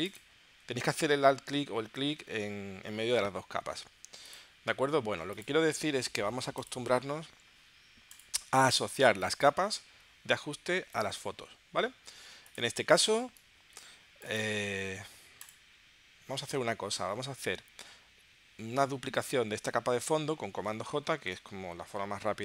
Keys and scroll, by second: 21.1 super+j.